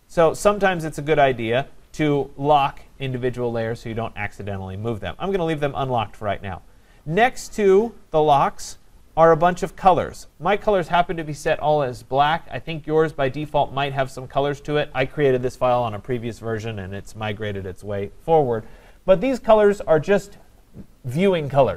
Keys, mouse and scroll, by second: 0.2 click.